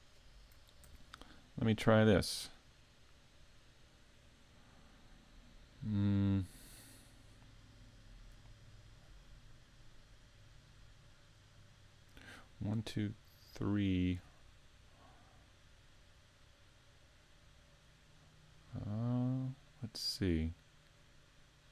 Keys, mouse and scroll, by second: 0.8 ctrl+r.